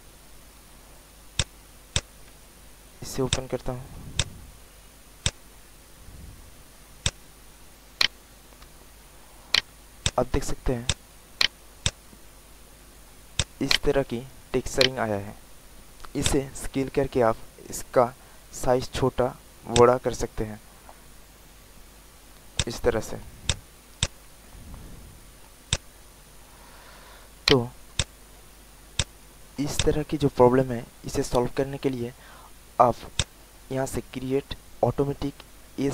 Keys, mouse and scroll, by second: 0.6 click, 3.2 alt+click, 3.8 alt+middle click, 4.1 alt+click, 5.2 click, 6.9 alt+click, 7.5 alt+middle click, 7.9 alt+right click, 8.6 alt+middle click, 9.5 alt+right click, 9.9 alt+click, 10.4 alt+middle click, 10.8 alt+click, 11.4 alt+right click, 11.8 alt+click, 12.2 alt+middle click, 13.3 alt+click, 13.7 alt+right click, 14.2 alt+middle click, 14.7 alt+right click, 16.2-21.6 drag, 21.9 alt+middle click, 22.5 alt+click, 22.8 alt+middle click, 23.4 alt+click, 24.6 alt+middle click, 25.2 alt+middle click, 25.6 alt+click, 26.0 alt+right click, 26.9 alt+middle click, 27.4 alt+right click, 27.9 alt+click, 28.4 alt+middle click, 28.9 alt+click, 29.3 alt+middle click, 29.7 alt+click, 31.4 alt+middle click, 33.1 click.